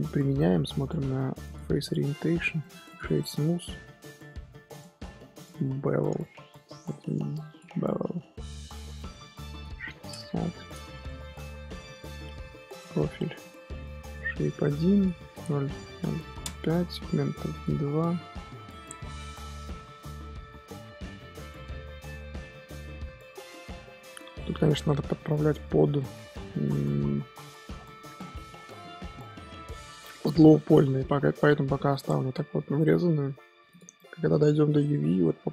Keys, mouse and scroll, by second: 2.1-2.6 middle drag, 2.6-3.1 right drag, 3.1-3.5 middle drag, 3.5 ctrl+2, 5.4-7.5 drag, 9.5-11.0 drag, 11.0 shift+middle drag, 11.2 scroll up 1, 11.3-11.8 scroll down 1, 11.8-12.7 scroll up 1, 12.7-15.3 drag, 15.3 KP_0, 17.5 click, 18.2-21.3 middle drag, 25.9-27.0 middle drag, 27.0 Tab, 28.2-31.2 middle drag, 32.0-33.4 middle drag, 33.4 scroll down 1, 33.7 click, 33.9-35.2 middle drag, 35.2-35.5 scroll up 1.